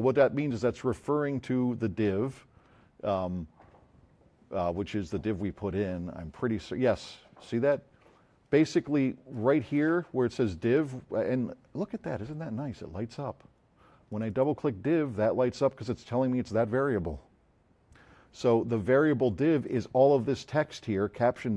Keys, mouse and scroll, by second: 9.3 click, 14.1 click.